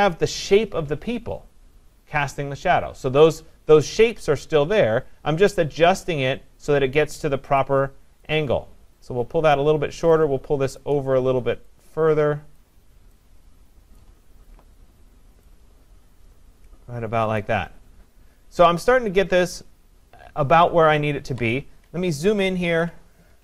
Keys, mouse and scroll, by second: 8.3 click, 9.6 click, 10.8 click, 17.4 click, 22.3 ctrl+=, 22.7 ctrl+=.